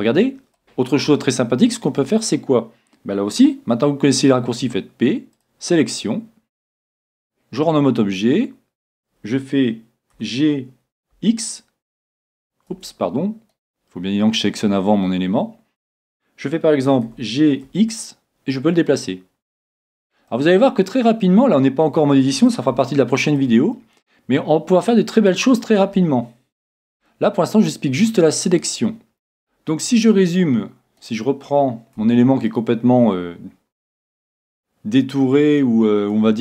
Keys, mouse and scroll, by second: 4.8 p, 6.9 Tab, 10.2 g, 13.5-15.5 right drag, 17.1 g, 20.3-22.1 middle drag, 22.9-25.6 middle drag, 26.0-31.0 middle drag, 31.0-32.7 right drag, 32.0 Tab, 32.5-34.3 middle drag.